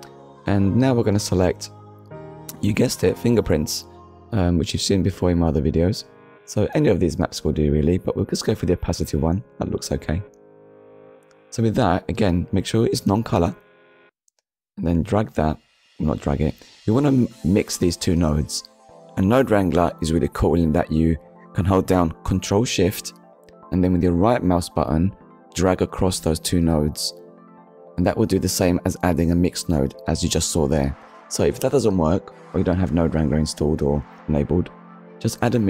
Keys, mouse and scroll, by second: 0.5 scroll up 1, 1.3 click, 3.0 click, 4.1 click, 8.3 click, 11.2 click, 13.6-14.0 scroll down 1, 14.8 middle click, 16.2 middle click, 20.5 ctrl+shift+right click, 22.4 click, 23.1 click, 24.8 click, 25.1 shift+a, 25.9 click, 26.8 m, 26.9 i, 27.2 x, 28.4 click, 29.1 click, 30.1 click, 30.8 Delete, 31.7 middle click, 35.0 click.